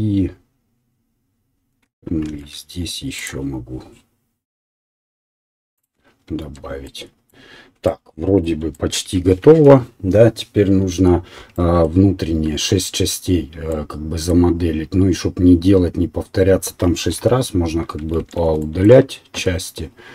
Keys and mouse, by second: 2.2 ctrl+r, 4.3-5.8 right drag, 5.8-20.1 middle drag, 6.6 Tab, 9.5 KP_7, 12.4 Tab, 17.1 KP_7, 18.2 shift+z, 19.4 1.